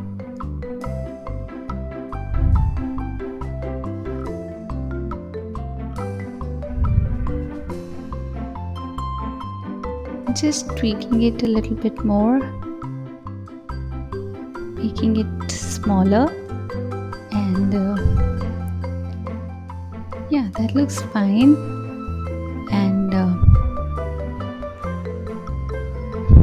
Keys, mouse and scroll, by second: 0.4 g, 1.9 r, 3.0 KP_1, 4.2 s, 4.8 g, 6.0 drag, 6.6 click, 7.5 click, 7.8-8.3 scroll up 5, 10.4 click, 11.2 click, 12.5 click, 13.1 click, 13.9 s, 16.6 click, 17.5 click, 18.9 g, 19.8 ctrl+z, 20.6-22.0 scroll down 2, 22.0 scroll up 2, 22.2-22.8 scroll down 2, 22.8 click, 23.5-24.7 scroll down 1, 24.7 click.